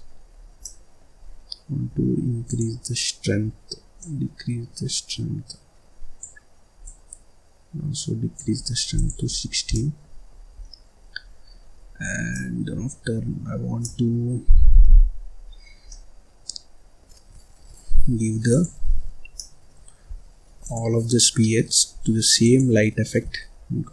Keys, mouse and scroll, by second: 0.3-0.7 scroll up 1, 0.7-2.4 middle drag, 2.4 click, 3.9-9.1 drag, 9.3-9.7 scroll down 2, 9.7 middle click, 10.3-10.6 scroll up 4, 10.6 scroll down 2, 10.6 middle click, 11.3-11.7 scroll down 1, 11.7-12.3 scroll up 5, 12.3 middle click, 13.1-13.8 scroll up 6, 13.8 middle click, 14.7-15.9 scroll up 12, 15.9-17.3 middle drag, 17.3-18.5 scroll up 9, 18.5 click, 19.4-20.6 middle drag, 20.6 shift+click, 22.3 shift+click.